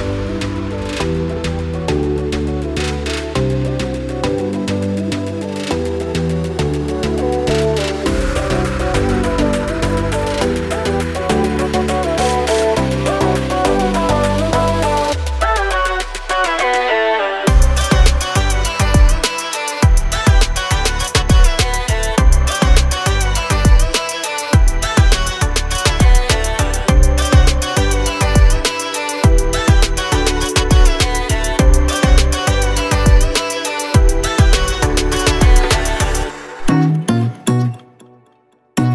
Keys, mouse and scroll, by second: 0.2 right click, 1.0 click, 1.8 click, 2.8 scroll down 1, 3.0 click, 3.5 right click, 4.1 click, 7.4 click, 9.3 scroll up 1, 9.8 scroll down 1, 10.8 click, 11.9 click, 13.4 double click, 14.1 F4, 14.6 click, 15.5 F9, 17.1 Page_Down, 18.1 Page_Up, 18.8 Page_Down, 19.1 Page_Up, 19.4 Page_Down, 19.7 Page_Up, 20.0 Page_Down, 20.2 Page_Up, 21.0 Page_Down, 21.3 Page_Up, 21.5 click, 22.0 scroll down 1, 22.3 scroll up 1, 22.8 ctrl+click, 24.2 right click, 25.2 ctrl+z, 26.0 click, 26.6 scroll down 1, 26.9-27.4 scroll up 1, 27.5-27.9 scroll down 1, 27.9-28.3 scroll up 1, 29.1 click, 30.9 click, 31.8 click, 33.5 click, 35.3 click, 35.9 click, 36.5 click.